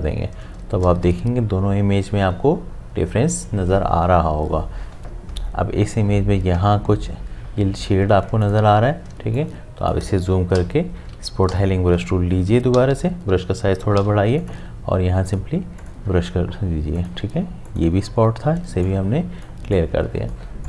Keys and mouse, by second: 0.6 space, 8.1 space, 8.4 ctrl+click, 9.1-12.9 typing, 9.3 click, 14.0 ], 14.4 click, 18.6 space, 18.9 click, 19.1 space.